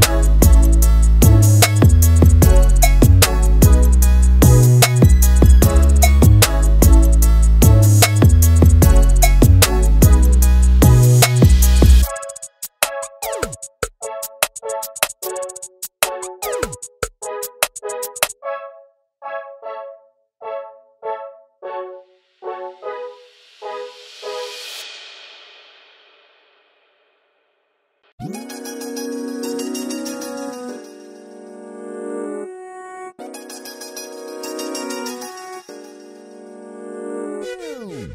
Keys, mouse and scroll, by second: 0.5 click, 2.1-2.9 scroll down 1, 2.9 scroll down 2, 3.3-5.2 middle drag, 5.2 alt+d, 7.4-8.0 middle drag, 8.0-8.5 scroll down 3, 8.5-9.3 middle drag, 9.3 click, 10.1 scroll down 2, 10.4-11.4 middle drag, 11.4-12.0 drag, 12.5 click, 14.1-15.8 middle drag, 15.8 alt+d, 19.8-20.6 middle drag, 20.6 click, 21.1-22.2 middle drag, 22.2 click, 23.6 click, 25.7 r, 34.3 Left, 35.7 click, 35.9 alt+d.